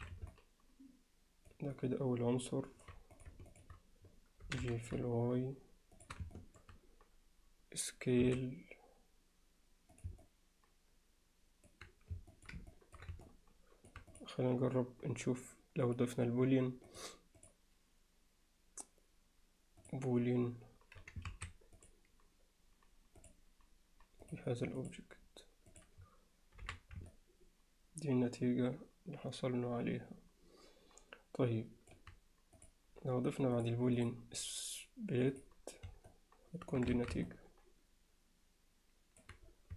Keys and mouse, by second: 0.0 alt+a, 0.3-1.5 middle drag, 1.8-2.8 alt+middle drag, 3.1 click, 3.6 shift+click, 4.5 g, 6.4 alt+middle drag, 8.2 s, 10.2-11.7 middle drag, 12.3 middle click, 12.7 ctrl+alt+middle click, 13.3-13.9 alt+middle drag, 14.2 click, 17.4-19.9 drag, 21.3 ctrl+s, 23.3 click, 24.3 click, 25.8 click, 27.1-27.5 alt+middle drag, 27.5 alt+right click, 27.6-31.9 alt+middle drag, 33.6 drag, 34.1-35.7 drag, 36.1-36.7 alt+middle drag, 37.0 alt+a, 37.3-39.2 alt+middle drag.